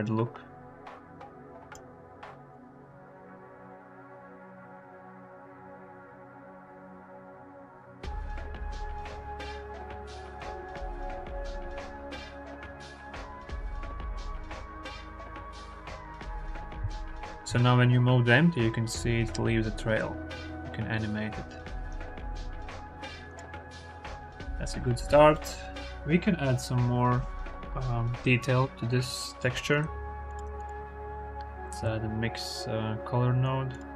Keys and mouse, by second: 2.5-9.1 drag, 9.2-10.2 drag, 12.5 click, 13.4 ctrl+z, 14.8 g, 15.1 y, 16.5 ctrl+z, 17.2 g, 23.5 ctrl+z, 25.2 click, 28.9-29.2 drag, 29.7 click, 30.1 click, 30.3 shift+a.